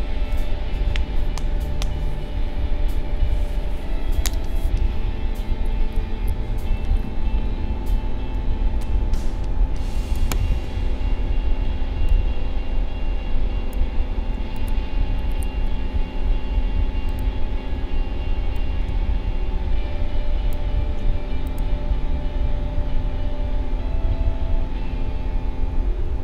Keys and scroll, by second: 10.5 ctrl+z.